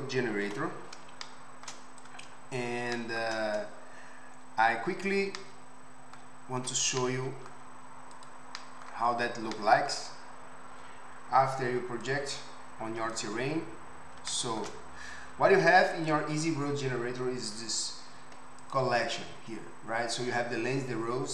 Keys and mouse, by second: 0.6 Tab, 2.0-8.3 drag, 6.7 Tab, 8.3-12.0 middle drag, 12.0-16.1 drag, 16.1-18.6 middle drag, 18.6 click, 18.7 middle click, 19.0 click, 19.1-21.3 middle drag.